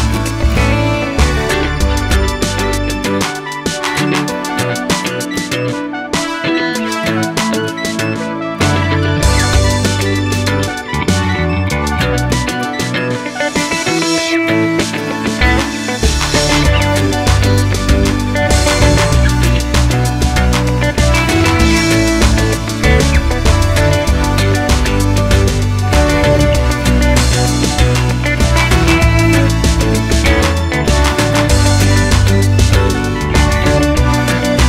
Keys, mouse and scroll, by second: 1.9 click, 2.4 click, 2.6 click, 3.2 drag, 3.4 click, 4.2 click, 4.4-6.2 middle drag, 6.5 scroll down 1, 6.8 middle click, 8.1 r, 8.9 middle click, 9.6-10.1 scroll down 1, 11.8-13.2 middle drag, 13.2 click, 14.8 ctrl+a, 15.6-17.5 middle drag, 17.5 click, 18.0 click, 18.2-24.7 middle drag, 23.4-23.8 scroll down 2, 23.8 alt+h, 24.7 click, 25.4-31.4 middle drag, 26.8 z, 31.4 click, 31.7-34.6 middle drag, 33.7-34.3 scroll up 2, 34.3 Tab.